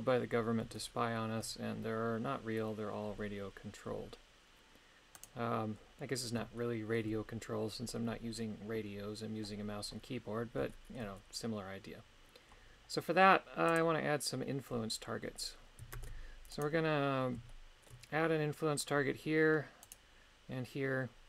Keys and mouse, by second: 0.8 shift+middle click, 5.2 right click, 6.6 shift+middle click, 10.7 shift+middle click, 13.7 click, 16.0 ctrl+Tab, 16.7 right click, 17.5 shift+middle click, 19.9 right click.